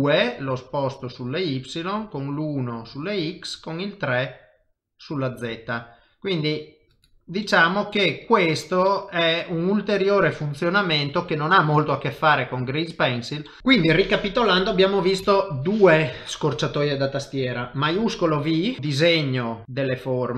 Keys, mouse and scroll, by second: 7.4 middle click, 8.5-9.0 scroll down 2, 8.8 middle click, 9.6-10.0 scroll up 1, 10.0 middle click, 11.0-11.7 scroll up 3, 11.5 middle click, 13.4 middle click, 13.6 shift+middle click, 15.2 KP_7, 16.2 shift+middle click, 16.4 shift+middle click, 18.0 shift+v, 18.5 click.